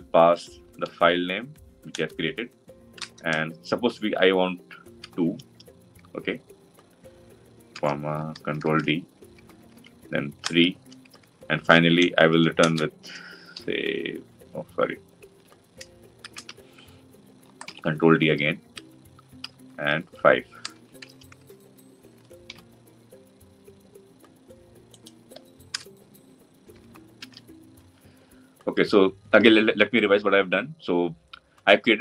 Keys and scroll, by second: 8.3 ctrl+d, 13.4 ctrl+v, 16.3 Delete, 17.4 ctrl+d, 22.4 ctrl+y, 27.1 ctrl+alt+l.